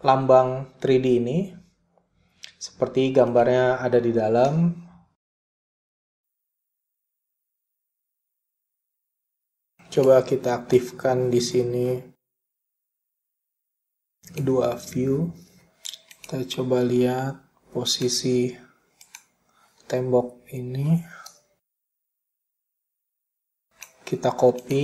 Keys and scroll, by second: 4.7 p, 11.2-12.0 typing, 21.8 p.